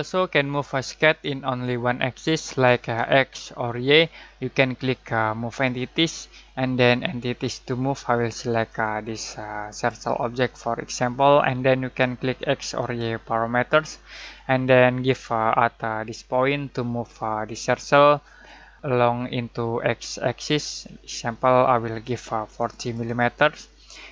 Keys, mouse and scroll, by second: 5.4 click, 8.6-9.9 drag, 22.0 click.